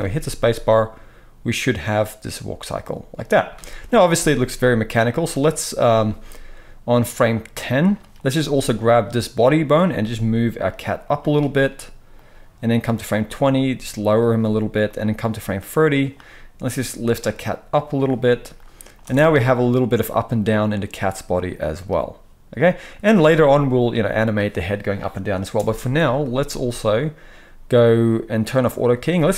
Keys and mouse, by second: 3.5 space, 9.0-12.1 middle drag, 9.9 g, 12.1-14.2 drag, 13.4 g, 14.2-14.9 middle drag, 14.9-18.1 drag, 16.6 g, 18.1-18.5 middle drag, 18.5-28.7 drag, 19.0 space, 25.5 space, 28.7-29.3 middle drag.